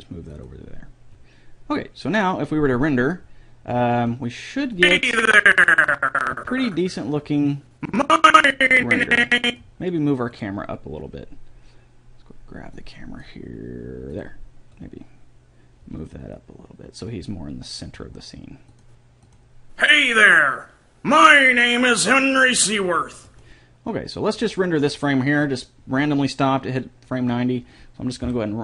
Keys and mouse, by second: 5.2-7.0 drag, 11.0-12.6 right drag, 13.2-14.8 right drag, 14.8-16.5 drag, 16.3 g, 19.2-21.6 drag, 23.8-25.6 drag.